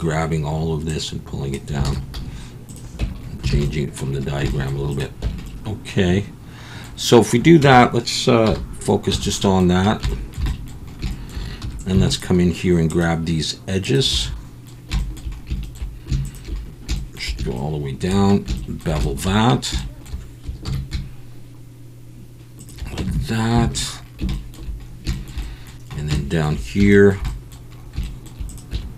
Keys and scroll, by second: 1.9 alt+a, 2.8 z, 3.0 Tab, 3.5 alt+a, 5.2 Tab, 7.6 Tab, 8.4 /, 9.1 Tab, 11.6 2, 20.6 ctrl+b, 23.0 Tab, 23.6 alt+a, 28.7 Tab.